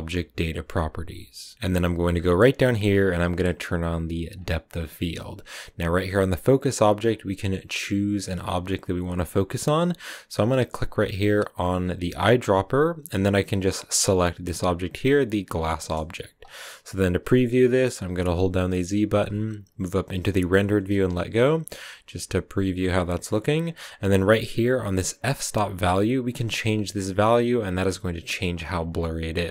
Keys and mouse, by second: 4.3 click, 19.7 z, 28.5 click.